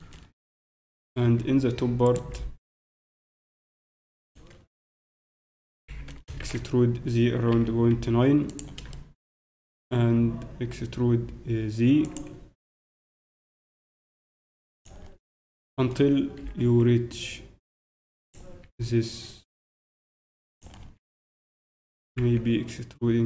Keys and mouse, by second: 1.4 Tab, 2.0-3.0 drag, 3.5 z, 3.7 click, 4.1 middle click, 4.2 middle click, 5.1 middle click, 5.7 e, 6.1 click, 8.9-10.7 drag, 9.7 e, 13.3 e, 15.6 click, 15.9-18.6 drag, 18.6 e, 18.6 s, 21.1-23.0 drag, 21.9 e.